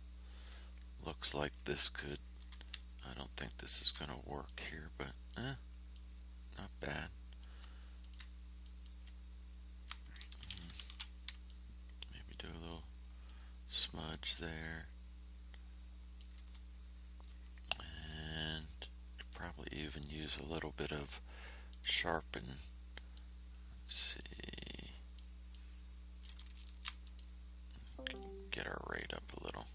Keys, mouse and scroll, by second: 3.7 ctrl+click, 5.9-7.6 drag, 8.0 ctrl+click, 8.6 ctrl+click, 10.8 k, 11.4-12.4 drag, 12.6 click, 14.6-16.3 drag, 19.2 click, 21.6 click, 23.1-25.3 drag, 25.4-26.5 drag, 26.5 ctrl+shift+scroll up 2, 27.0 ctrl+shift+click, 28.1 click, 28.9 click.